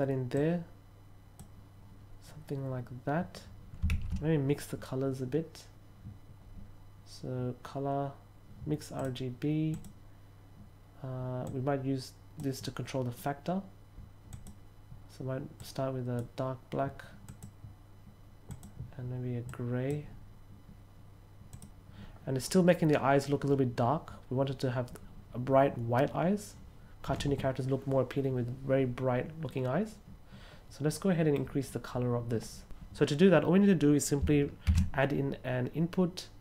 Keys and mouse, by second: 0.3 click, 8.9 drag, 9.6 click, 11.4 click, 14.2 click, 15.5-16.1 drag, 17.2 click, 18.4 click, 19.4-19.8 drag, 21.4 click, 30.8 middle click, 34.6 shift+a.